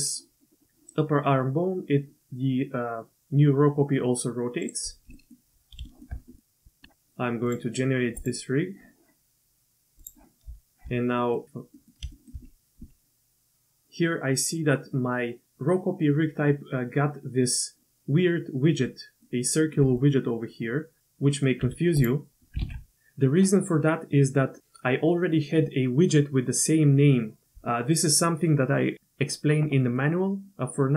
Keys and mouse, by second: 5.1 middle click, 5.9 shift+drag, 6.3 drag, 6.6 Tab, 8.4-8.9 drag, 10.0 click, 11.2 click, 11.7 middle click, 12.1 shift+middle drag, 18.9-19.2 middle drag, 19.6 click, 20.0-21.5 drag, 20.0 d, 21.0 d, 21.6 q, 22.3 ctrl+z, 22.3 q, 22.6 ctrl+z, 29.8 click.